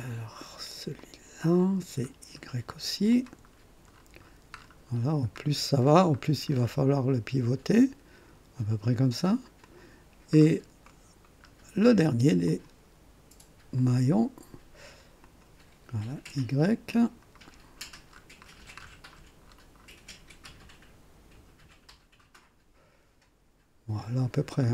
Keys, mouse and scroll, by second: 1.0 click, 2.1 scroll up 1, 3.1 click, 3.5-4.2 scroll down 4, 4.9-5.5 scroll down 3, 6.5-6.8 scroll down 1, 7.0-7.6 scroll up 2, 9.6 click, 10.3-10.7 scroll down 1, 10.8 right click, 11.4 scroll up 1, 12.5 click, 13.8 click, 15.2 click, 16.2 scroll up 1, 17.0 click, 17.4-18.1 scroll down 2, 18.5 scroll down 1, 19.1 scroll down 1, 20.0-20.4 scroll down 1, 20.4 middle click, 21.9 scroll down 1, 24.0 scroll down 1.